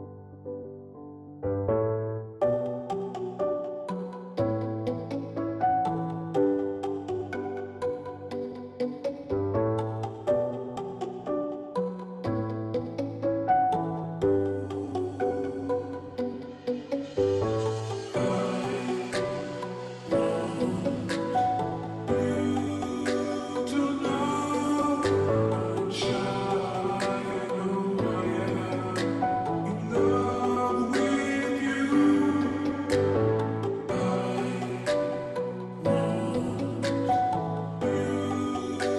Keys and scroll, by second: 0.9 Left, 1.0 Left, 1.4 Left, 1.9 Left, 2.3 Left, 2.6 Right, 2.8 Right, 5.9 Left, 5.9 Up, 6.6 Left, 6.7 Left, 12.4 space, 35.0 alt+BackSpace, 38.7 ].